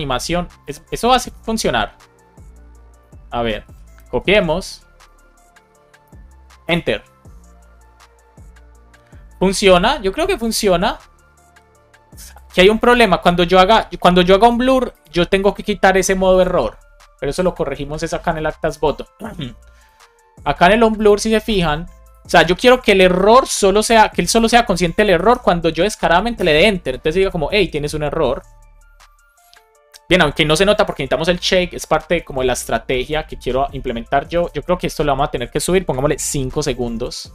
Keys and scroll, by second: 2.9 Escape, 5.9 BackSpace, 6.6 Return, 23.4 Escape, 25.0 shift+super+Left, 25.2 BackSpace, 26.4 Return, 35.8 BackSpace, 36.4 Down.